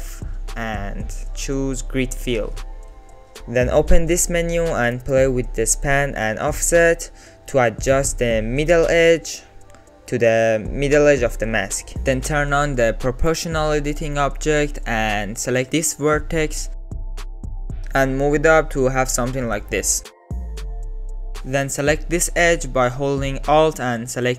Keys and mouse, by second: 2.1 alt+z, 2.4 click, 3.3 alt+click, 5.9 click, 6.6 click, 8.3 click, 12.3 middle click, 13.0 alt+z, 14.0 click, 14.7 alt+z, 15.0 middle click, 15.8 1, 16.2 click, 16.8 middle click, 17.4 ctrl+z, 17.7 g, 18.4 alt+z, 18.6 click, 18.9 alt+click, 19.1 g, 20.3 click, 20.4 g, 20.8 click, 21.0 click, 21.6 2, 21.9 alt+click, 22.0 middle click, 22.3 alt+shift+click, 22.6 middle click, 23.0 alt+shift+click, 23.3 ctrl+z, 23.6 middle click, 24.1 alt+middle click.